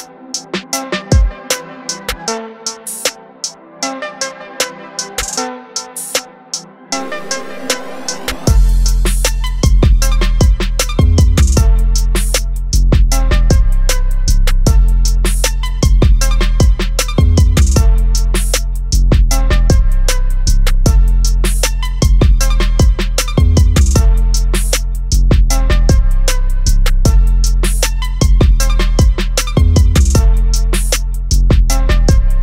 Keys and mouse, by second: 3.9 click, 7.2 click, 24.4 click, 27.9 click, 29.9 click, 31.9 click.